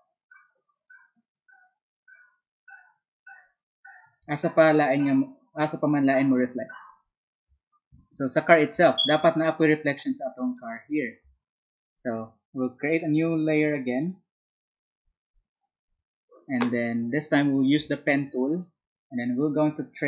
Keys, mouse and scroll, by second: 0.8 ctrl+click, 9.0 space, 9.7 click, 10.4-12.8 drag, 18.0 p.